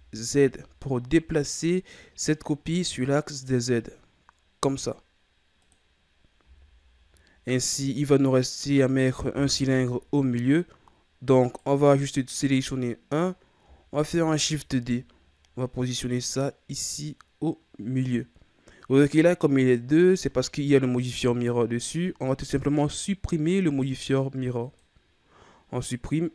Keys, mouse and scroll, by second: 6.1 scroll down 3, 6.4 a, 7.4-7.9 scroll down 2, 7.9-9.5 middle drag, 9.5 KP_3, 10.5-11.0 scroll up 7, 11.4 right click, 14.0 shift+d, 24.6-26.2 drag, 26.2-26.3 scroll up 1.